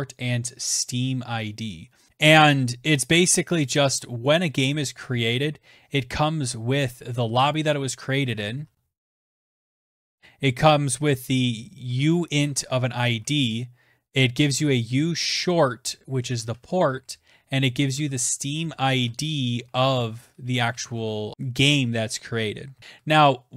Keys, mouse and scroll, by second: 1.8 click, 2.0 ctrl+f, 2.1 typing, 2.9 click, 4.3 typing, 4.4 Return, 6.7 click, 7.1-22.5 typing, 9.2-11.0 drag, 20.8 Tab, 22.7 Down, 22.8 Tab.